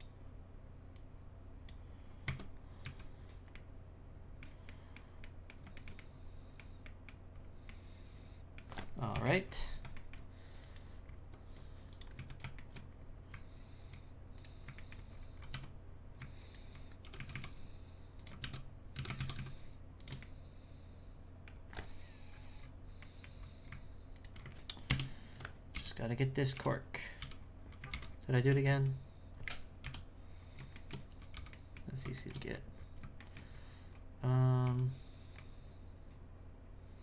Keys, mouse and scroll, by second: 2.3 Tab, 2.8 z, 3.2-3.5 scroll down 3, 3.5-7.3 middle drag, 7.3-7.7 scroll up 2, 7.7 middle click, 8.6-9.1 scroll down 2, 9.1 KP_1, 9.4-9.9 scroll up 1, 9.9 shift+middle click, 10.6 right click, 11.0 scroll up 3, 11.3 Tab, 12.2 z, 12.6 shift+middle click, 13.0-14.3 scroll up 1, 14.3 right click, 14.8 ctrl+middle click, 14.9-15.6 scroll up 5, 15.6 1, 16.4 alt+right click, 17.0 g, 18.4 shift+s, 20.2-21.5 middle drag, 21.5-22.3 scroll down 4, 22.3-23.0 scroll up 6, 23.0 middle click, 23.4-24.1 scroll up 3, 24.1 alt+right click, 24.9 ctrl+KP_Add, 25.7 h, 26.3 scroll down 4, 26.5 3, 27.1 3, 27.2 l, 27.4-28.7 scroll down 14, 27.9 alt+h, 28.7 z, 29.8 KP_1, 30.4-30.7 scroll down 1, 30.7 shift+middle click, 31.3 b, 32.1 shift+middle click, 32.5-34.6 scroll up 10, 33.3 shift+middle click.